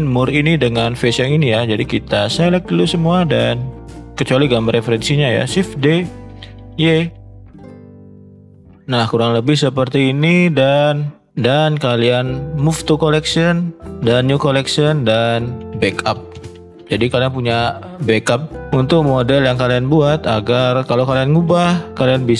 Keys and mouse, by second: 1.6 click, 3.3 ctrl+drag, 3.8-4.2 ctrl+drag, 4.9 shift+middle click, 6.4 shift+d, 9.4-9.7 shift+middle drag, 10.4 shift+middle click, 11.5-18.6 right drag.